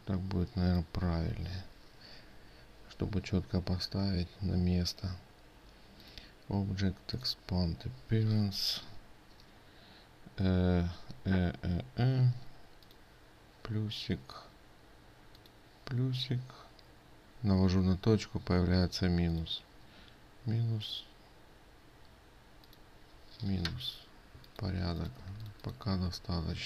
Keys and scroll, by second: 25.8 ctrl+space.